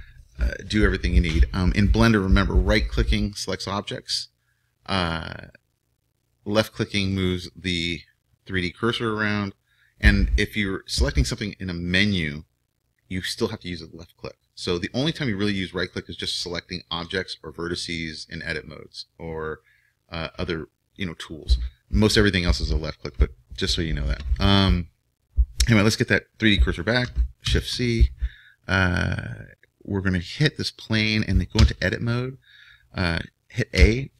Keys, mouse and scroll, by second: 3.0-7.9 right drag, 7.0-10.6 drag, 15.9-27.4 right drag, 27.4 shift+c, 30.2-33.8 middle drag, 31.5 Tab, 33.8 a.